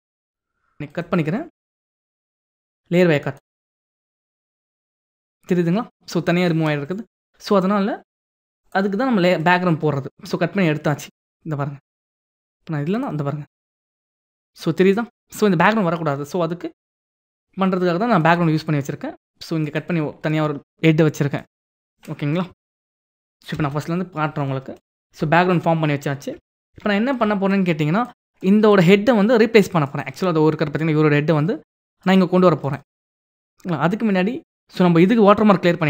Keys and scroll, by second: 22.3 ctrl+alt+z, 26.3 ctrl+=.